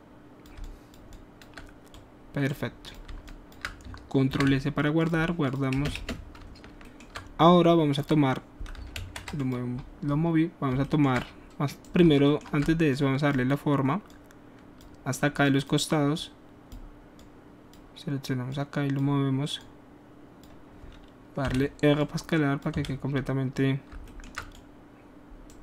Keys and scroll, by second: 4.3 ctrl+alt+s, 5.7 space, 6.6 space, 8.9 ctrl+z, 21.5 r, 22.8 w.